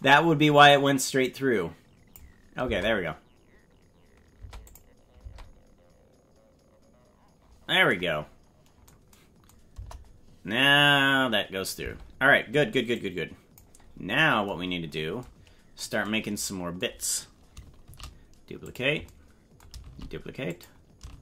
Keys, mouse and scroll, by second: 1.2 click, 2.6 space, 4.4 space, 4.7 click, 5.3 space, 9.7 KP_0, 11.0-11.5 scroll up 4, 11.8 space, 12.9 click, 13.9 scroll down 2, 14.6-15.2 scroll down 5, 17.8 shift+d, 19.8 shift+d, 21.1 shift+d.